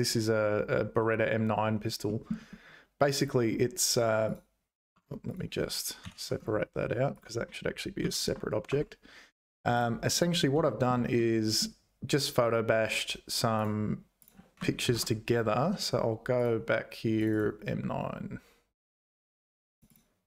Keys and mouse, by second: 2.0 middle click, 4.3 click, 5.0 Tab, 5.3 click, 6.0 ctrl+l, 7.1 click, 8.0 p, 9.7 Tab, 9.7 click, 10.1 click, 10.6 shift+middle click, 11.1 middle click.